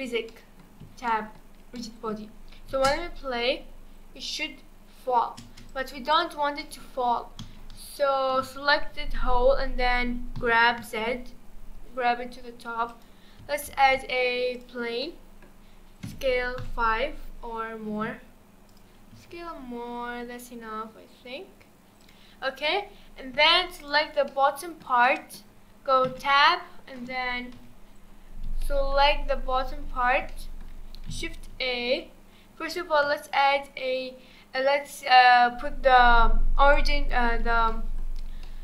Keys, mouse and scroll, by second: 0.0-0.3 scroll down 2, 0.3-2.7 middle drag, 2.7 space, 5.4 space, 5.7-6.2 drag, 6.6 middle drag, 6.8 scroll down 2, 7.6 a, 8.3 KP_1, 10.4 g, 13.7 shift+a, 15.0-16.0 middle drag, 16.0 s, 19.1 s, 22.7-23.8 scroll up 4, 23.8 click, 24.3-26.1 middle drag, 26.1 Tab, 26.5-27.6 scroll up 2, 27.6 KP_1, 28.6 shift+middle click, 29.0-29.8 shift+scroll up 4, 30.3-31.5 shift+middle drag, 31.5 shift+a, 36.7 shift+right click, 37.7-38.1 middle drag, 38.1-38.4 scroll down 2, 38.4-38.6 middle drag.